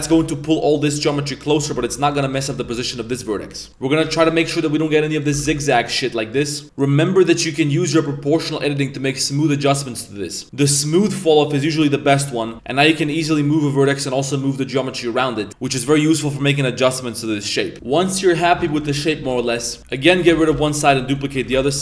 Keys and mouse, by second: 1.7 z, 2.0 right click, 2.2 middle click, 2.6 g, 3.3 middle click, 3.7 ctrl+z, 3.7 g, 4.0 g, 5.1 right click, 6.0 middle click, 6.6 middle click, 6.6 Tab, 7.0 right click, 8.0 click, 8.5-10.2 drag, 10.4 click, 11.5 middle click, 12.4 middle click, 12.5 g, 15.7 right click, 15.9 middle click, 16.2 right click, 16.3 g, 17.7 middle click, 17.7 1, 17.7 z, 17.7 shift+s, 17.7 a, 18.9 middle click, 19.2 a, 19.7 b, 20.4 shift+d, 20.5 s.